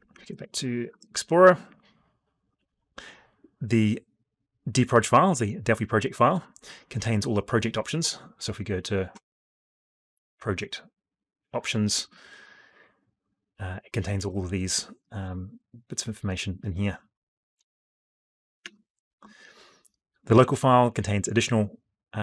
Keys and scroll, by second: 0.0 alt+Tab, 18.2 alt+Tab.